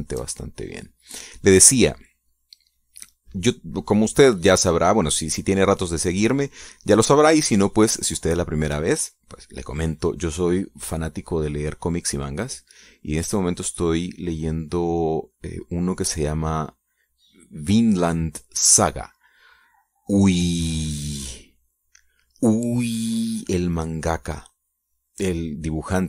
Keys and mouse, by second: 0.5-10.8 drag, 10.9-17.3 drag, 17.4 middle click, 17.7 click, 18.0 click, 20.0 click, 20.6 click, 21.4 click, 22.2 click, 22.4 middle click, 22.9 click.